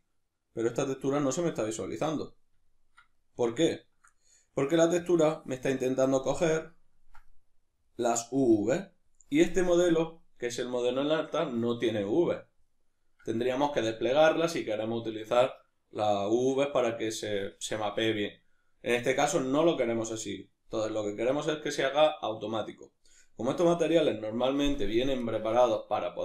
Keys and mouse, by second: 2.4-5.0 ctrl+middle drag, 5.0-6.5 drag, 6.5-26.2 middle drag.